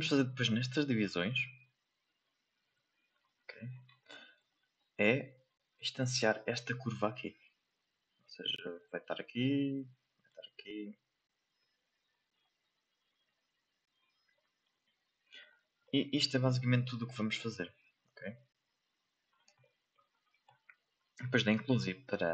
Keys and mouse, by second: 0.9 click, 1.5 click, 2.0 click, 2.6 click, 4.0 shift+middle click, 6.9 shift+middle click, 8.3-9.8 drag, 10.5 click, 11.5 click, 13.0 click, 14.6 click, 15.8 shift+middle click, 16.8-18.0 drag, 18.6 click, 19.6 shift+middle click, 20.7 middle click.